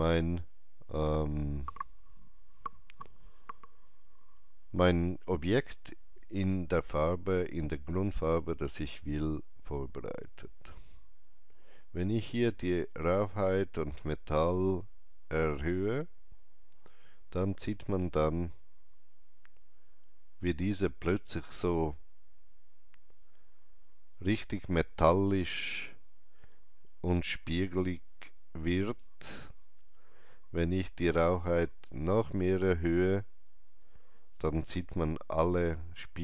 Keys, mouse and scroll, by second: 5.4 alt+right click, 5.4 click, 5.5-15.7 alt+drag, 15.7 scroll down 1, 18.5-35.9 drag, 18.5-18.9 scroll down 1, 25.7 alt+right click, 35.9-36.2 alt+drag.